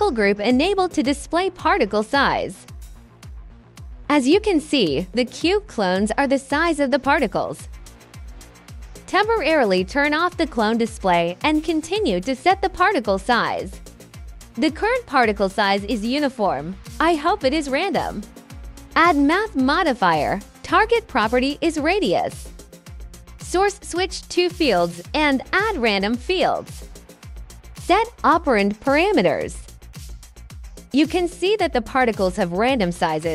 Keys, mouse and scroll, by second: 0.2 alt+click, 1.7 alt+click, 3.0 right click, 8.0 click, 9.5 click, 9.7 click, 10.4-12.6 drag, 12.8 alt+click, 15.8 alt+click, 16.8-18.3 alt+drag, 19.5 click, 21.9 click, 22.8 click, 24.1-26.7 drag, 27.7 2, 28.1 alt+right click, 28.3 alt+click, 28.5 alt+middle click, 29.3 alt+click, 30.0 alt+click, 30.3 alt+click, 33.1 right click.